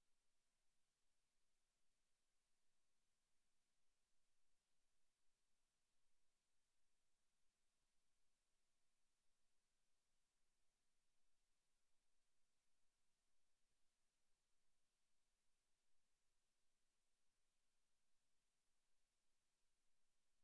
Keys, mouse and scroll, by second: 12.8 scroll up 1, 17.3 click.